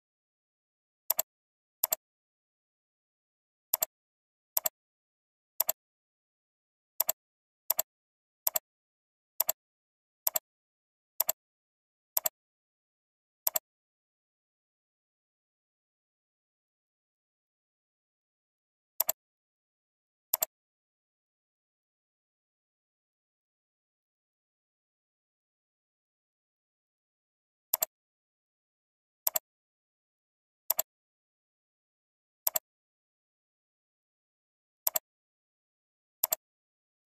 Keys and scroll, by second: 8.2 ctrl+c, 8.9 ctrl+v.